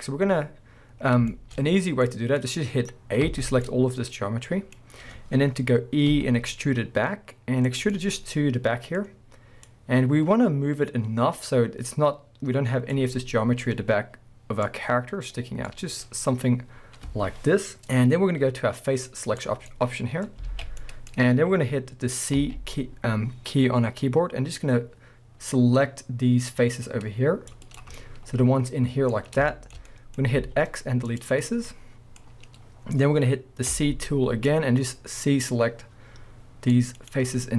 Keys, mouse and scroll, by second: 0.0-1.4 middle drag, 0.3-1.3 scroll up 1, 1.6-2.0 scroll up 1, 2.0 middle click, 3.3 a, 3.6 middle click, 6.1 e, 7.8 click, 8.1-9.0 middle drag, 9.0 scroll up 1, 9.6 click, 13.1-14.7 scroll up 2, 14.7 click, 15.9 scroll down 2, 16.0-19.3 middle drag, 19.3 click, 19.7-20.5 middle drag, 20.5 alt+a, 20.8-22.4 middle drag, 22.4 c, 27.8 right drag, 28.0-31.2 middle drag, 29.1-29.5 scroll up 2, 30.4 x, 31.2-31.5 drag, 31.5 scroll down 1, 31.7-37.1 middle drag, 32.3 scroll up 1, 33.7 c, 37.1 right click.